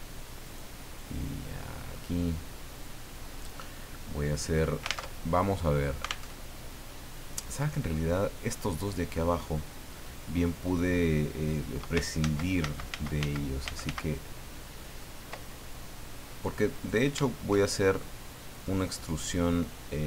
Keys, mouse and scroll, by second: 0.4 right click, 0.9 click, 5.0 alt+Tab, 6.2 alt+Tab, 12.2 ctrl+z, 16.7 right click, 18.5 click.